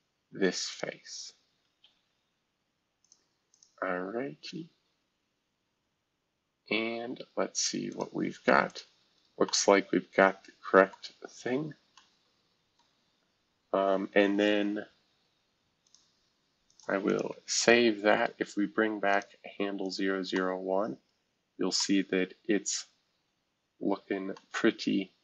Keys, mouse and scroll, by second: 0.7 click, 1.8 Escape, 3.0 click, 3.5 click, 6.2-7.3 scroll down 1, 7.3-7.9 scroll up 1, 7.9 click, 8.7 click, 9.1-9.4 scroll up 1, 10.9 middle click, 11.1-11.9 scroll down 2, 12.8-14.9 middle drag, 12.9 scroll down 2, 17.6 ctrl+s, 19.3 space, 21.9-24.3 scroll down 1, 24.3-25.2 scroll up 1.